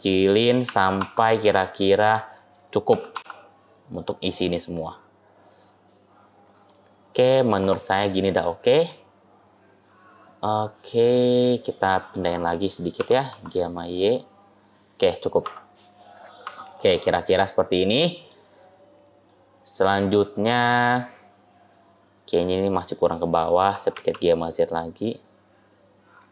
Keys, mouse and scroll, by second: 0.5 s, 2.7 g, 6.6 middle click, 7.5 click, 7.9 middle click, 12.1 click, 12.9 g, 14.9 click, 15.3 Tab, 16.0 click, 16.3 Tab, 16.6 middle click, 19.1 middle click, 22.7 click, 23.6 g.